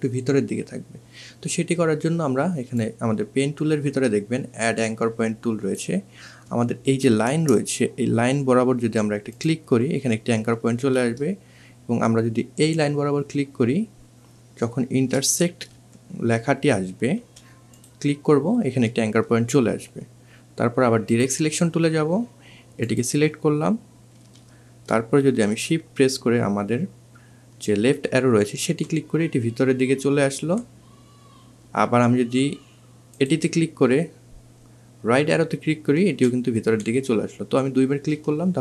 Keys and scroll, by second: 14.6 2, 27.5 shift+Left, 34.9 shift+Right, 35.5 shift+Right.